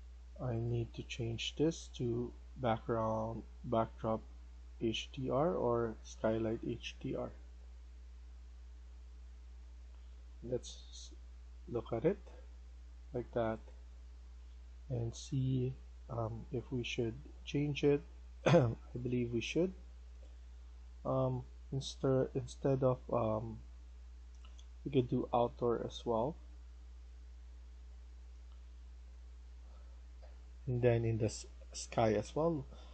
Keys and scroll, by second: 30.1 F1, 30.2 F1.